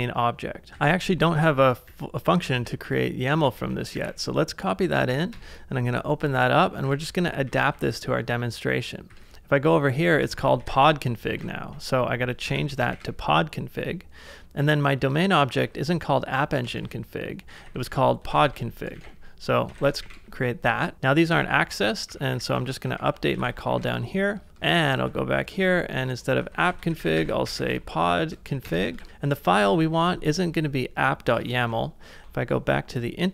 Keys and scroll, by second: 0.0-4.4 typing, 5.3 Return, 6.2-7.9 typing, 9.1-12.9 typing, 14.6 j, 15.6 b, 16.6-28.1 typing, 28.6 Return, 28.9 ctrl+c, 29.2-29.9 typing, 31.6 super+Tab.